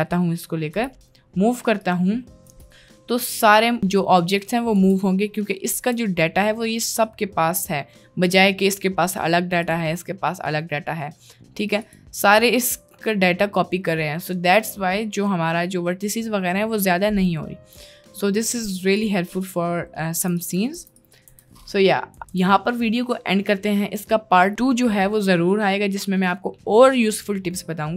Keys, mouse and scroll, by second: 0.9 g, 2.4 o, 2.6 g, 4.9 g, 5.8 Tab, 8.7 click, 9.7 click, 11.8 click, 18.6 middle click, 19.1 click, 20.2 Delete, 20.5 click, 20.8 Delete, 21.1 click, 21.4 Delete, 21.8 click, 22.2 Tab, 22.4 Tab, 22.5-23.0 middle drag, 23.7 middle drag.